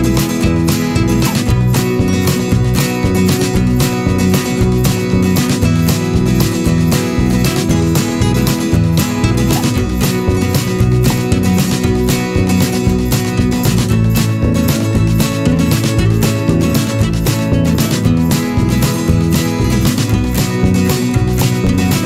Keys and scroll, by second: 1.3 p, 4.9 ctrl+z, 6.1 ctrl+z, 9.8 v, 14.5 m.